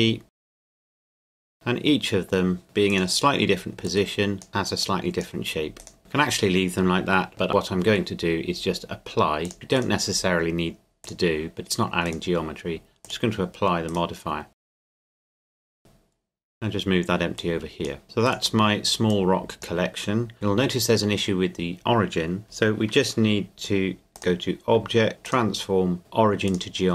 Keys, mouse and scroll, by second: 0.6 shift+click, 0.6 shift+d, 1.0 shift+click, 1.1 shift+d, 1.7 middle click, 2.6-2.9 scroll down 2, 2.9 right click, 3.9 click, 4.5 right click, 4.8 click, 5.8 right click, 6.0-7.5 drag, 9.4 click, 9.8 right click, 11.0 click, 12.1 right click, 13.0 click, 13.9 right click, 14.6 click, 14.8 right click, 15.1 click, 15.7 right click, 16.3-17.4 scroll down 1, 17.4 click, 18.3 right click, 19.1 click, 20.3 shift+middle click, 24.1 click.